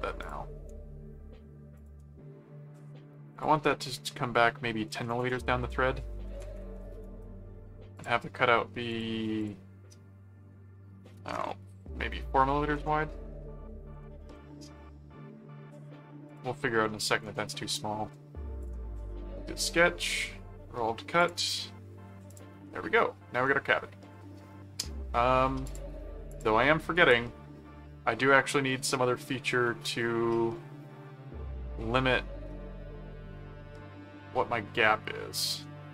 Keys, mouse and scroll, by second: 0.2 click, 1.8 shift+click, 3.3 click, 7.0 right click, 8.0 click, 8.9 click, 14.2 middle click, 16.3 click, 18.6 click, 21.2 click, 22.3 click, 22.6-24.8 middle drag, 25.6 click, 26.3 click, 28.3 middle click.